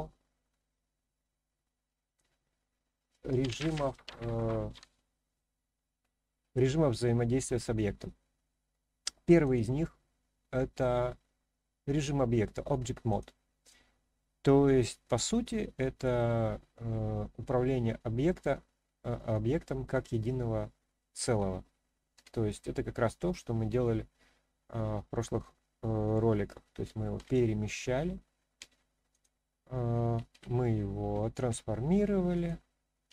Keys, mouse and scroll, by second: 9.4 click, 29.1-30.1 drag, 30.3 ctrl+z, 31.5 s, 32.3 click.